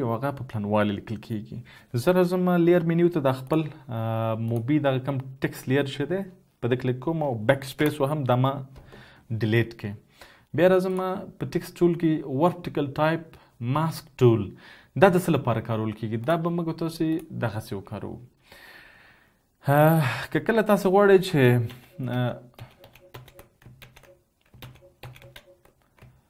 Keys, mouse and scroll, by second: 9.4 BackSpace, 12.5 right click, 23.1 ctrl+z, 23.5 ctrl+z, 24.0 ctrl+z, 25.3 ctrl+z, 26.0 ctrl+z.